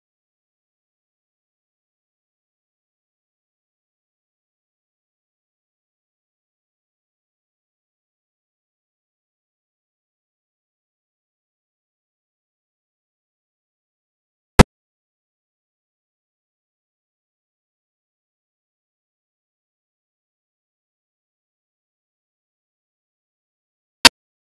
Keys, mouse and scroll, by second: 0.0-1.0 middle drag, 1.0-5.7 drag, 5.7 middle click, 6.0 click, 6.7 middle click, 7.2 KP_0, 7.6 click, 9.3-9.6 shift+middle drag, 9.6 click, 9.8 scroll down 7, 10.0-10.3 scroll up 4, 10.3 middle click, 10.8 click, 11.0 shift+d, 11.1 middle click, 11.2 shift+d, 11.4 click, 11.4 shift+a, 12.8 drag, 13.0 middle click, 13.7-15.9 drag, 16.4 click, 16.5 0, 16.7 middle click, 17.1 click, 17.1 shift+a, 18.2 click, 19.8-20.9 drag, 21.2-24.4 drag.